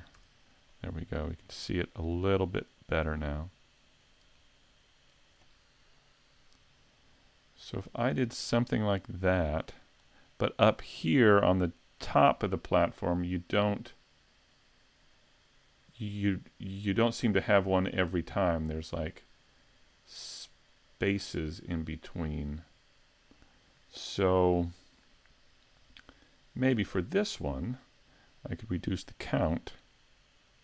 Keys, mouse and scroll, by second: 0.2 a, 0.7 middle click, 2.4 shift+middle click, 3.3 middle click, 5.1 right click, 9.5 click, 13.8-17.0 scroll down 1, 17.0 scroll down 1, 26.8 click, 28.7 click, 28.9 click, 29.2 click, 29.4 click, 29.6 click.